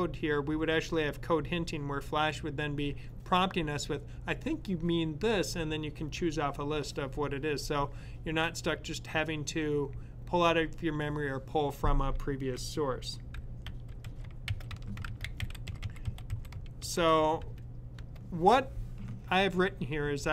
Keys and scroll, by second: 12.9-17.3 typing.